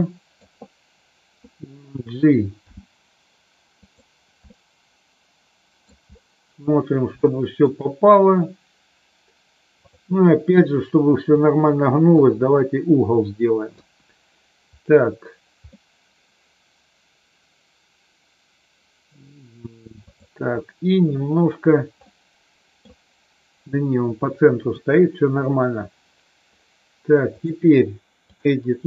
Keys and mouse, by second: 2.6 g, 3.8 click, 4.6-5.8 middle drag, 7.2 shift+middle click, 11.4 click, 13.7 KP_1, 15.7-19.2 middle drag, 20.1 click, 22.1 middle click, 24.7 Tab, 27.4-28.4 drag.